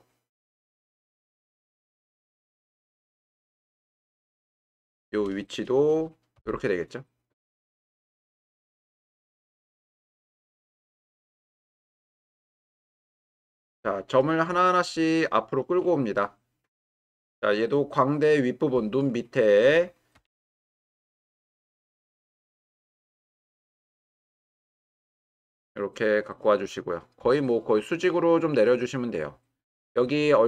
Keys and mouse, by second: 5.1 click, 6.3 g, 11.6 shift+middle click, 13.7-14.1 shift+middle drag, 15.2 middle click, 16.3 middle click, 20.1 g, 20.4 y, 22.2 g, 22.4 y, 26.7-27.8 drag.